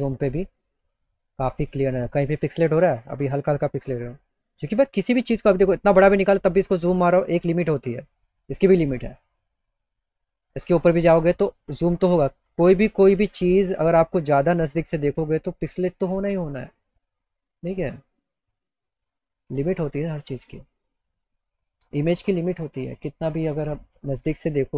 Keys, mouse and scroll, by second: 6.0 middle click, 6.4 middle click, 11.9 middle click, 13.2 middle click, 13.6 middle click, 14.2 middle click, 17.7 middle click, 18.8 middle click, 21.5 click.